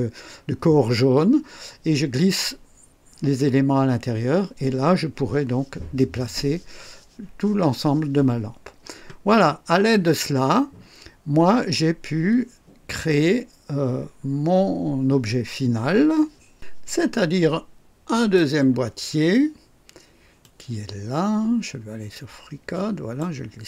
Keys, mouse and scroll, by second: 18.1 click, 20.4-23.3 drag.